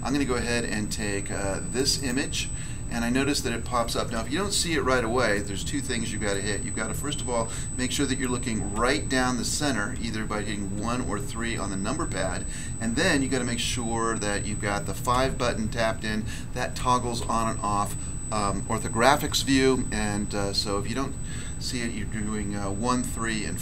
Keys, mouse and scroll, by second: 1.7 click, 1.9 click, 4.1 5, 5.3 middle click, 6.3 middle click, 8.7 1, 9.9 3, 10.7 1, 12.0 3, 15.1 5, 16.7 5, 17.2 5, 20.4 typing.